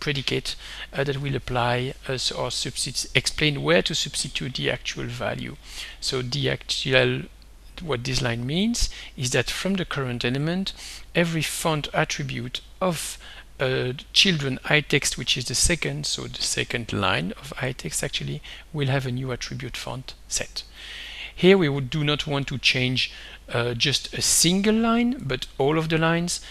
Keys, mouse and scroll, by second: 8.1 click, 11.6 click, 13.4-14.8 drag, 15.1 click, 21.2 click, 25.2 right click.